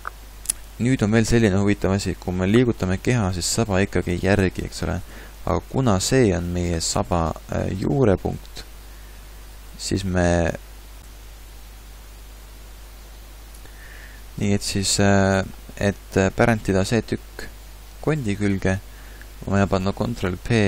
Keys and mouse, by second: 2.8 g, 6.9 g, 20.3 ctrl+p.